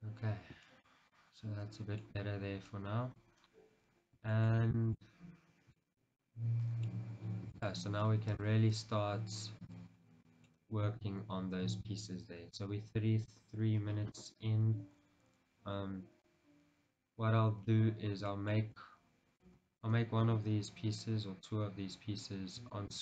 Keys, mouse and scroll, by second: 0.2 Tab, 0.4-0.8 scroll down 2, 2.4 scroll down 1, 2.9 middle click, 3.5 scroll down 1, 4.5 shift+middle click, 5.3 scroll up 1, 5.9-8.5 shift+middle drag, 7.3-7.7 scroll down 2, 8.5 click, 8.9-10.4 right drag, 10.1 scroll down 2, 10.4 middle click, 15.9-17.3 scroll down 1, 17.3-18.0 scroll up 1, 18.4 shift+middle click, 19.6 KP_1, 20.0 shift+z, 22.1 scroll down 1, 22.9 shift+middle click.